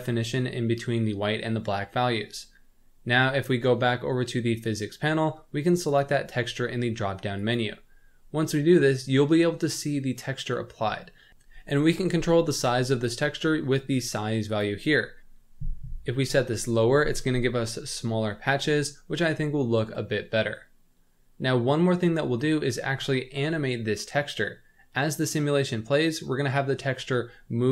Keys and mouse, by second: 4.6 click, 5.8-7.6 drag, 8.4-10.5 middle drag, 11.1 middle drag, 11.5-11.9 middle drag, 14.4 click, 18.8-21.4 middle drag.